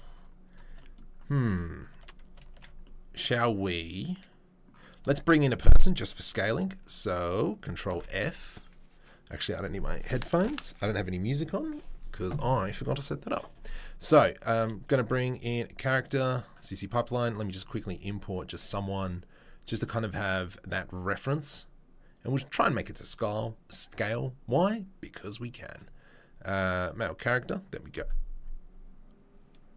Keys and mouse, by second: 0.1 shift+click, 1.9 Tab, 2.8 ctrl+s, 5.2 shift+a, 7.9 alt+f, 16.2 click, 16.4-17.2 middle drag, 17.2-29.7 drag.